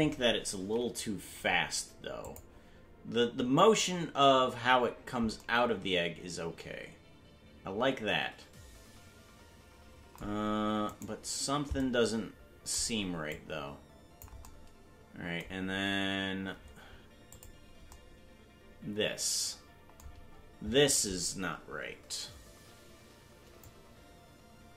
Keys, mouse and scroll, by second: 0.2-2.2 scroll down 4, 2.2 click, 3.4-3.9 scroll up 1, 11.8 right click, 13.3 click, 17.3 click, 23.6-24.7 shift+drag.